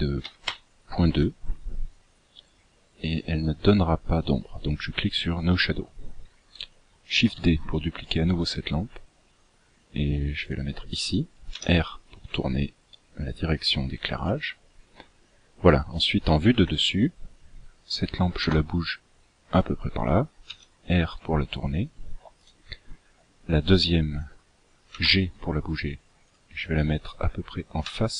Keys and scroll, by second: 7.5 shift+d, 11.7 r, 16.7 KP_7, 18.6 g, 25.1 g, 28.0 r.